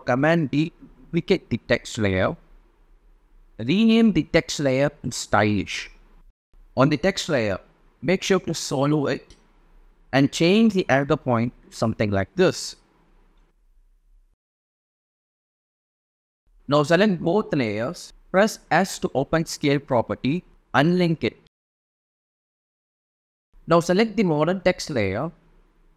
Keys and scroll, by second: 0.5 super+d, 2.8-5.2 typing.